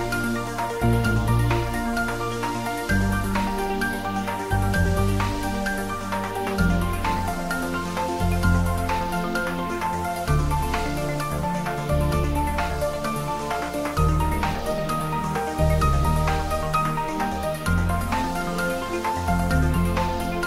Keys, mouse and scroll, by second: 0.8 ctrl+s, 2.1 click, 2.9 s, 3.7 click, 4.3 ctrl+z, 5.4 click, 6.1 s, 7.6 click, 15.5 s, 15.9 click, 16.1 middle click, 16.9 s, 17.4 click, 17.9 ctrl+s, 18.2 shift+middle click, 19.2 click, 19.8 Tab, 20.3-20.4 typing.